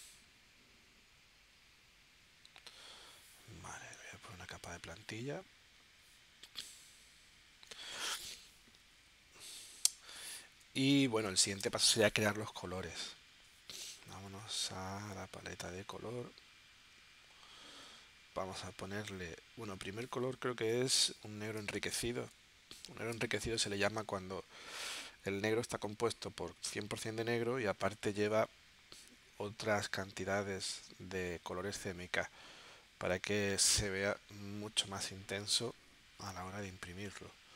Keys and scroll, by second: 8.9 z, 10.1 space, 20.0 super+Tab, 21.6 space, 23.1 space.